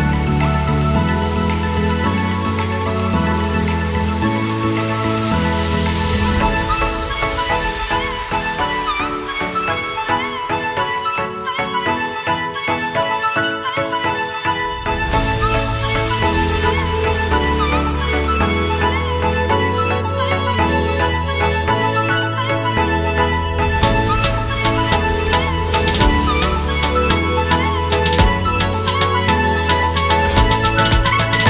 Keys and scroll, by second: 7.8 c, 13.2 ctrl+q, 19.3 F3, 22.8 shift+F2, 23.2 Escape, 26.9 KP_Add, 29.2 ctrl+z.